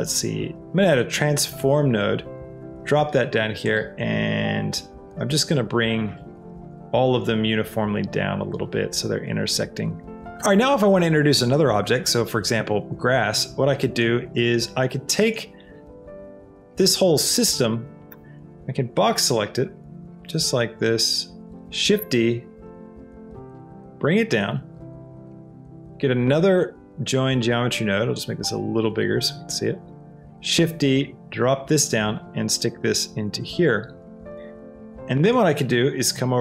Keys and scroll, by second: 18.0 b, 21.8 shift+d, 30.2 shift+d.